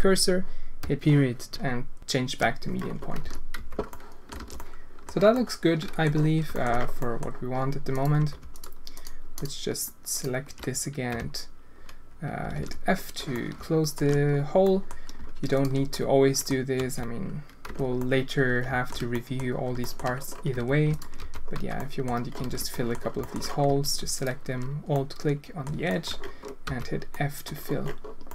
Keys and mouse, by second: 3.2 z, 3.5 Tab, 3.9-4.3 drag, 4.3 alt+a, 4.6-5.0 drag, 5.3-6.0 drag, 6.5 shift+click, 7.0 drag, 8.1 Tab, 8.5 alt+click, 8.9 alt+click, 11.1 f, 12.5 alt+a, 13.3 alt+shift+click, 14.6 click, 15.9 click, 16.7 f, 17.6 Tab, 18.0-18.9 drag, 19.1 drag, 19.8 shift+drag, 20.5 Tab, 21.2 f, 21.5 Tab, 21.7 drag, 22.5 alt+a, 22.7 click, 23.2 shift+click, 23.6 Tab, 24.2-24.5 alt+drag, 24.9 click, 25.8 shift+click, 26.6 f, 27.1 click, 27.3 middle click, 28.2 middle click.